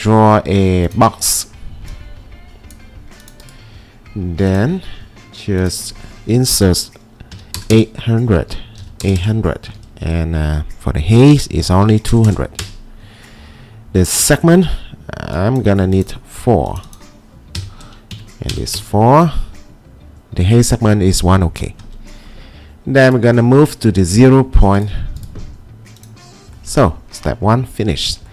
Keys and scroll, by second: 7.1-9.3 typing, 8.4 Tab, 11.6-12.4 typing, 12.6 Return, 17.3-18.5 typing, 18.1 Tab, 18.8 Return.